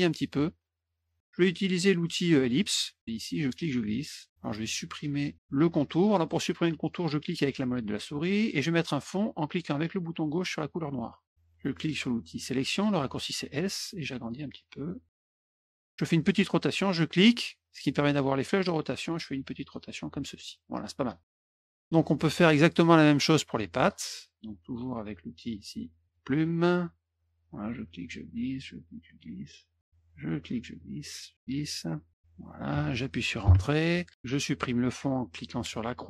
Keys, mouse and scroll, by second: 0.2 shift+click, 2.4 click, 3.4 click, 8.0 middle click, 10.7 click, 12.7 click, 14.0 click, 15.3 click, 17.0 click, 18.7 click, 20.4 click, 20.9 middle drag, 21.4 middle click, 22.2 middle click, 23.8 middle drag, 26.0 click, 26.4 middle click, 27.6 click, 28.7 click, 30.0 click, 31.3 click, 32.1 click, 33.4 Return, 35.7 click.